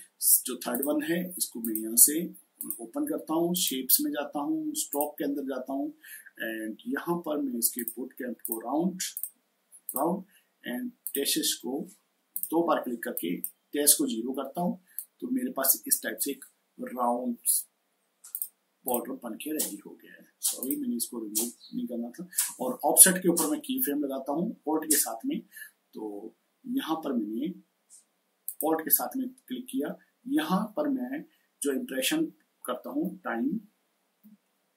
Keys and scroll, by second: 32.8-34.7 typing.